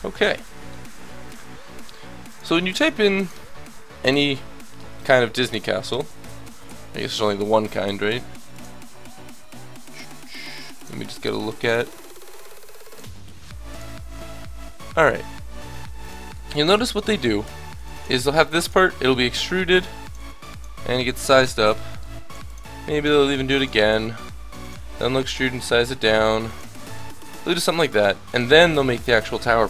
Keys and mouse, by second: 0.2 Tab, 1.3 KP_1, 16.7 Tab, 17.4 Tab, 17.6 a, 17.8 b, 18.2-19.7 drag, 18.5 e, 19.7 s, 20.2 e, 22.3-24.9 typing, 26.5 e, 28.0 e, 28.5 s.